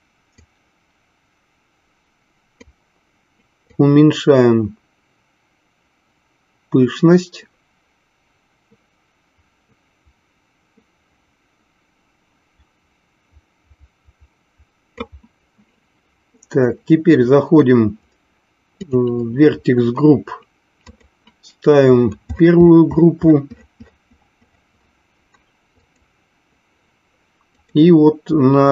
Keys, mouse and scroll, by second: 0.4-2.9 drag, 4.0-15.4 drag, 18.8 click, 20.9-26.5 drag, 27.6-28.7 drag.